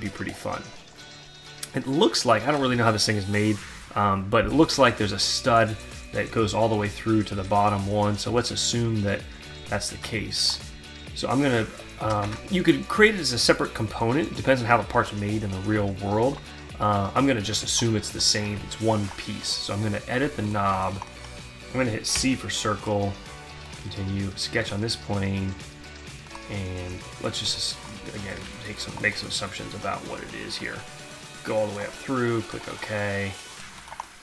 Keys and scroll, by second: 9.5 alt+Tab, 16.9 alt+Tab, 21.7 c, 27.9 q.